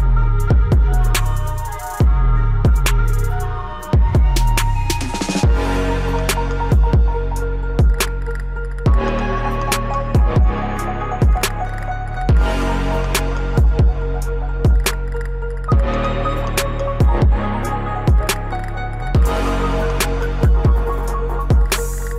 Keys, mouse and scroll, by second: 1.1 click, 2.4 ctrl+Page_Down, 6.6 click, 9.8 scroll up 1, 11.3-20.8 drag, 20.8-21.8 scroll up 1, 21.8 click, 22.0-22.1 scroll up 1.